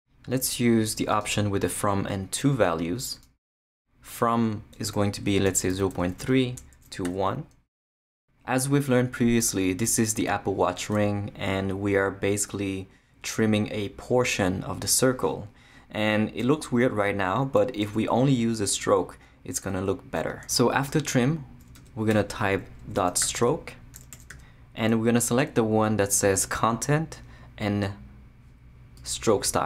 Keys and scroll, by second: 5.2-7.0 typing, 21.7 Return, 22.1-24.8 typing.